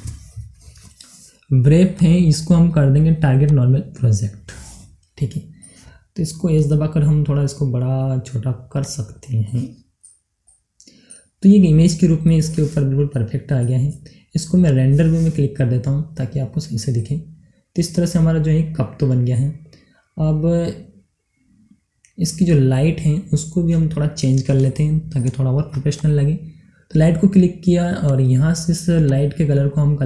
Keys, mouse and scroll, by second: 1.9 click, 4.6-6.4 middle drag, 6.4 s, 8.8 click, 9.0 scroll down 1, 9.3-11.3 middle drag, 11.3 scroll up 1, 11.9 middle click, 12.7 scroll down 1, 13.1-14.6 middle drag, 14.6 click, 16.0 scroll up 1, 16.6 scroll down 1, 16.9 middle click, 16.9-19.5 right drag, 19.6 scroll up 1, 20.1 scroll down 1, 20.7 scroll up 1, 21.5 scroll down 1, 24.5-25.9 shift+middle drag, 25.9-30.0 drag.